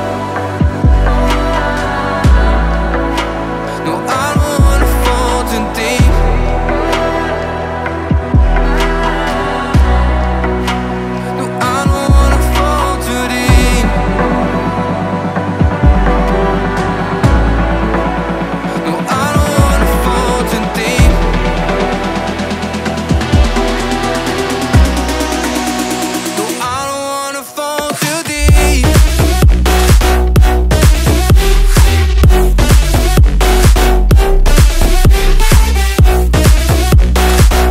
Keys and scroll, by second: 1.6 Tab, 2.9 Delete, 3.6 alt+Tab, 4.4 Tab, 6.4 space, 7.8 Right, 9.5 space, 11.7 ctrl+d, 12.7 Right, 13.0 BackSpace, 13.1 2, 13.2 Return, 15.2 ctrl+g, 16.4 space, 18.2 Delete, 22.2 ctrl+g, 22.9 t, 23.0 e, 23.2 t, 23.4 Return, 24.0 space, 26.2 space, 28.0 space, 28.4 o, 33.0-37.7 typing.